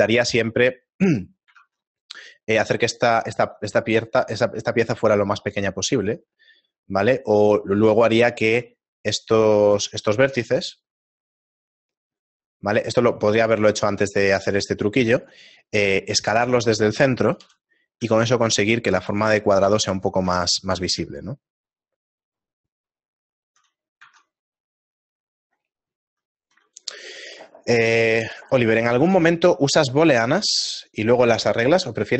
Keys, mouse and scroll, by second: 2.0 ctrl+Tab, 2.0 right click, 2.9 right click, 3.1 ctrl+KP_Add, 6.5 s, 9.0 right click, 9.0-9.4 scroll up 2, 12.3 shift+right click, 17.4 shift+right click, 17.4 ., 18.0 s, 19.7 Tab, 20.3 Tab, 20.9 a, 21.3 shift+middle click, 24.2 Tab, 24.5-25.0 scroll down 3, 25.9-26.3 scroll down 4, 26.3 right click, 26.6 x.